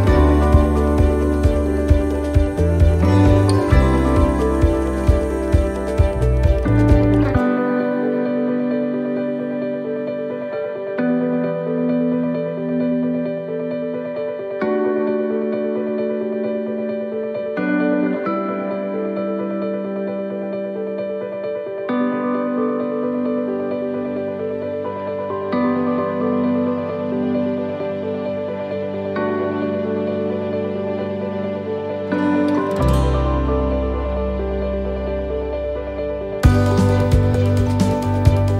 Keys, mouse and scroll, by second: 0.1 middle click, 1.0 right click, 1.7 shift+right click, 2.4 shift+right click, 3.1 shift+right click, 3.9 shift+right click, 4.0 middle click, 4.4-4.8 scroll up 2, 5.2 shift+right click, 5.9 middle click, 6.9 middle click, 8.8 click, 11.3 click, 15.1 middle click, 17.2 shift+middle click, 18.2 right click, 18.6 shift+right click, 20.1 shift+right click, 21.2 shift+right click, 21.8 click, 27.0 click, 27.0 middle click, 29.8 click, 31.7 middle click, 34.8 middle click, 34.8 click, 37.3 middle click, 38.2 right click.